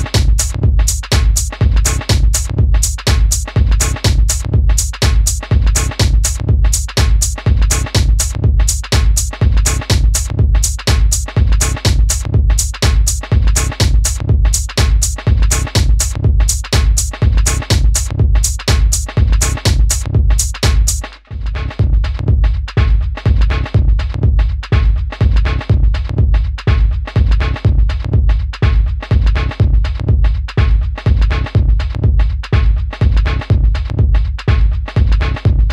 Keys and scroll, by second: 20.6 super+d, 33.5 d.